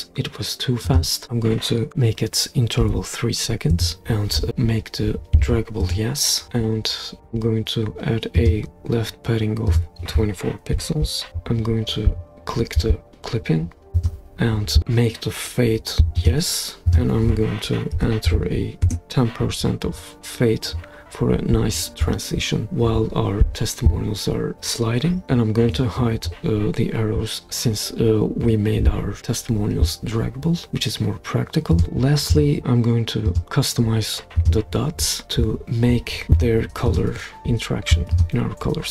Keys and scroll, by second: 2.8 3, 3.7 Return, 10.7-11.0 typing, 17.9-18.3 typing, 18.9 Return.